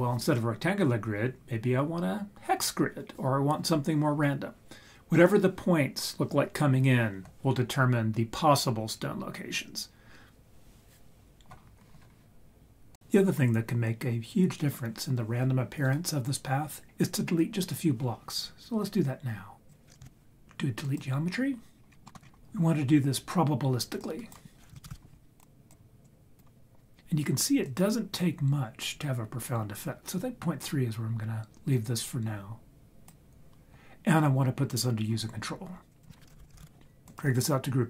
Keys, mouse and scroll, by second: 19.6 click, 20.0 shift+d, 20.9 click, 21.7 scroll down 2, 21.8-22.4 scroll up 5, 22.0 middle click, 24.0-25.4 drag, 26.0 click, 27.6-33.1 drag, 35.9-37.1 drag.